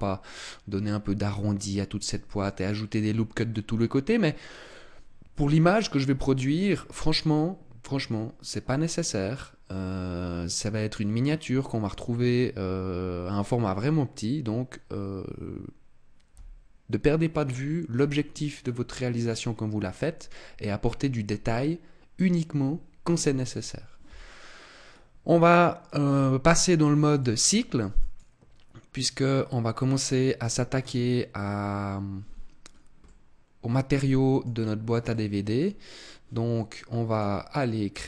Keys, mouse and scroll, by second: 2.3 shift+middle click, 3.4 middle click, 4.6 middle click, 5.9 middle click, 18.3-19.9 scroll down 2, 24.9-26.4 scroll down 3, 27.1 click, 30.7 click, 32.6 scroll down 2, 33.0 middle click, 35.1 middle click, 37.0 click.